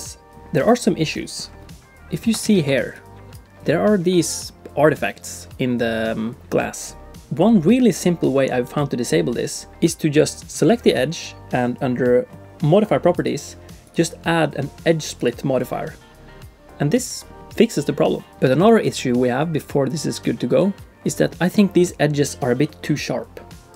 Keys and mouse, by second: 2.4 ctrl+b, 7.2 ctrl+alt+b, 10.3 click, 13.1 click, 13.9-15.5 drag, 19.0 shift+click, 19.9 shift+middle click.